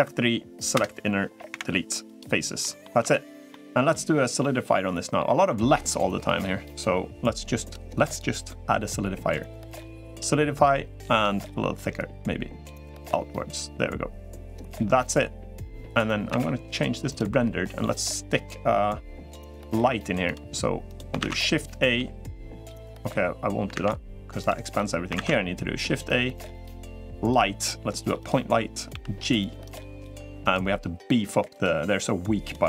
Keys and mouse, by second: 1.2 Delete, 2.4 middle click, 3.2 Tab, 3.2-3.7 middle drag, 4.2-4.9 middle drag, 8.0-10.4 drag, 11.7-16.7 drag, 16.7 z, 24.2 shift+a, 24.9 shift+a, 28.9 g, 30.3 g.